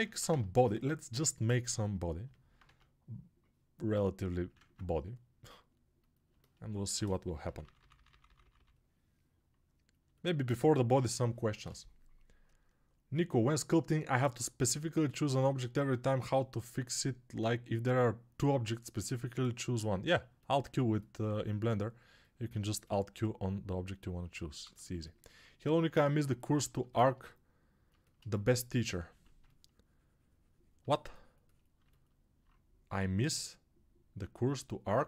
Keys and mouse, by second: 6.2-9.9 ctrl+alt+middle drag, 9.9-35.0 alt+drag.